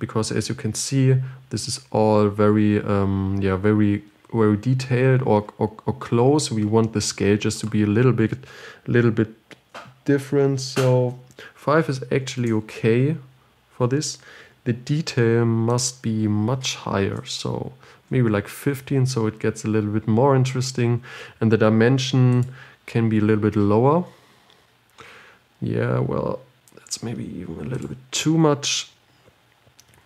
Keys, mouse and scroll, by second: 17.7-19.5 drag, 19.5-20.0 scroll up 5, 20.1-20.6 scroll down 3, 24.5-26.6 drag, 26.6 scroll up 4, 27.3 scroll down 3, 28.1-30.0 drag.